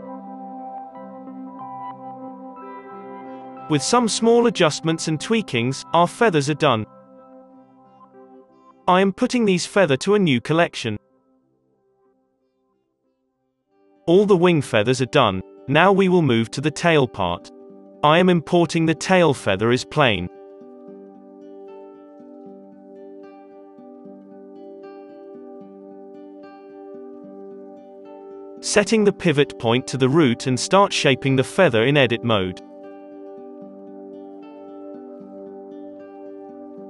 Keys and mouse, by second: 0.0-1.5 typing, 2.0 alt+a, 2.1-3.2 drag, 2.2 Tab, 2.6 g, 2.8 Tab, 3.0 alt+a, 3.3 click, 3.4 z, 3.7 alt+a, 7.2 ctrl+s, 7.2 z, 7.2-8.8 drag, 7.4 KP_3, 7.8 ctrl+s, 8.8 middle click, 9.0-10.8 drag, 9.7 h, 10.2 b, 10.8-12.5 middle drag, 11.0 m, 12.5 Return, 14.0-16.7 drag, 15.1 Delete, 15.6 alt+h, 15.7 alt+a, 16.7 KP_3, 16.7 shift+a, 16.7 KP_7, 19.1 s, 19.4 g, 20.2 g, 23.6 z, 24.0-27.2 middle drag, 24.0 s, 27.2 click, 27.6 middle click, 27.6 g, 27.9 Tab, 28.4 1, 28.5-30.4 drag, 28.8 shift+s, 29.0 Tab, 30.6 click, 31.8 click, 31.9 middle click, 32.2 Tab, 33.0 ctrl+r, 33.7 ctrl+r, 34.4 middle click, 35.0 2, 35.1-36.5 drag, 35.3 g, 35.9 right click, 36.5 Tab.